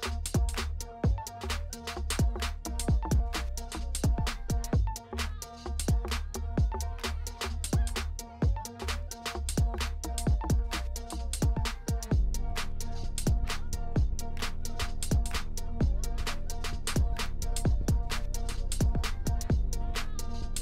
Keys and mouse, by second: 0.4 ctrl+z, 0.7 ctrl+s, 3.3 drag, 4.2-5.4 drag, 6.1 click, 8.0 space, 15.8 space, 16.3 click, 17.3 ctrl+s, 18.9-20.6 drag.